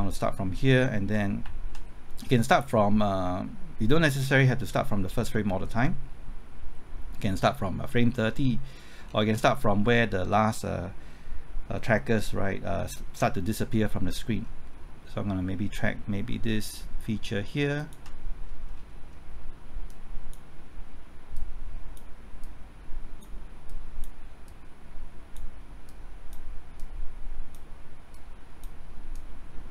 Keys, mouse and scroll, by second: 1.4 typing, 9.1 scroll down 1, 14.3 scroll up 1, 17.8 ctrl+click, 18.4 scroll up 1, 19.9-29.7 drag.